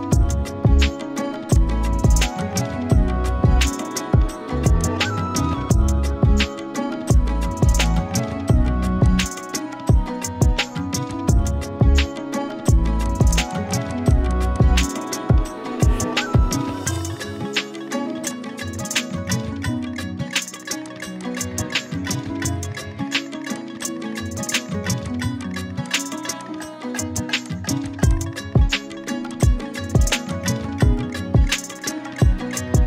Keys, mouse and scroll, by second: 1.5-4.2 drag, 9.0-9.9 shift+drag, 13.0 click, 13.3 click, 21.0 z, 21.2-22.8 click, 21.6-22.7 z, 22.8 z, 23.5 click, 24.3-24.7 scroll up 1, 24.7-27.9 typing, 25.0 click, 25.4 click, 26.1-26.7 click, 27.2 click, 27.5 click, 27.8 click, 28.1-31.5 drag, 31.6 z, 31.9 click, 32.1-32.5 z, 32.5 z.